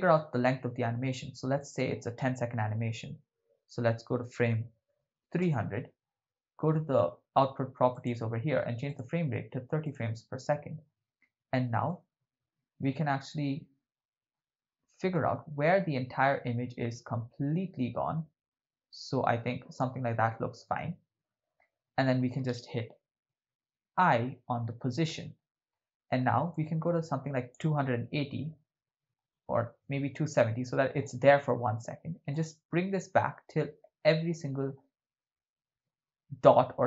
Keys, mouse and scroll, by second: 1.6-5.5 drag, 5.1 0, 7.9 click, 8.9-10.0 drag, 11.9 ctrl+middle click, 15.1-19.8 drag, 25.2 i, 26.6 click, 30.4 click, 32.3-36.8 drag.